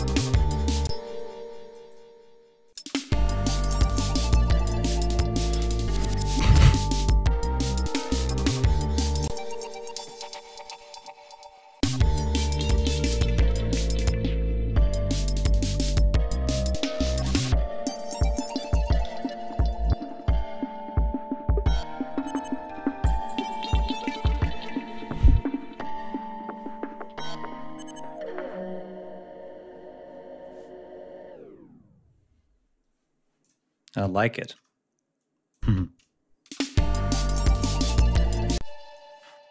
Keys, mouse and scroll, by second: 0.2 click, 0.8 space, 2.7 ctrl+space, 8.8 ctrl+scroll up 2, 9.2 ctrl+space, 9.4 ctrl+click, 9.6 ctrl+e, 9.9 ctrl+a, 10.6 alt+shift+Down, 11.6 click, 11.8 space, 12.8 g, 13.2 ctrl+scroll down 1, 14.2 click, 15.5-17.2 ctrl+drag, 18.0 ctrl+scroll down 2, 18.9 ctrl+f, 19.4 g, 20.2 ctrl+click, 20.5 ctrl+scroll up 2, 22.4 ctrl+scroll down 2, 22.8 ctrl+scroll up 2, 26.5 ctrl+scroll down 2, 33.3 click, 35.4 click, 35.6 space, 36.4 space, 36.6 scroll down 2, 37.3 scroll down 2, 38.5 space, 38.5-39.0 drag.